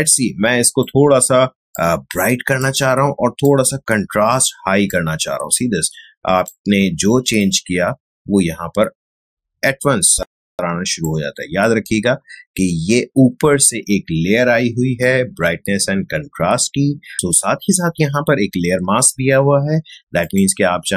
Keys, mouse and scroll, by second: 11.8-13.7 drag, 20.2 click.